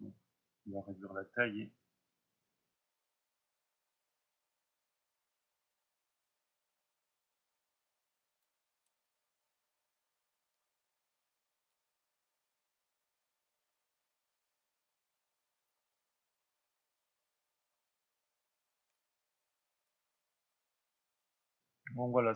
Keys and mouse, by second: 1.4-3.0 drag, 3.3-3.6 drag, 3.9-4.2 drag, 4.2 middle drag, 4.5-5.8 drag, 5.8-6.4 middle drag, 6.4-6.9 drag, 6.9-8.9 middle drag, 8.9 drag, 9.2-9.5 middle drag, 9.5 drag, 9.8 middle drag, 10.0 click, 10.2 middle click, 10.7 drag, 10.9-11.9 middle drag, 11.6 f, 11.9-12.6 drag, 12.6 middle drag, 12.7-13.1 drag, 13.1 middle drag, 13.4 click, 13.7 middle drag, 13.9 click, 14.1 middle click, 16.0 click, 16.8 middle click, 17.0 click, 17.7 middle click, 18.1 click, 18.5-19.9 ctrl+middle drag, 19.7 click.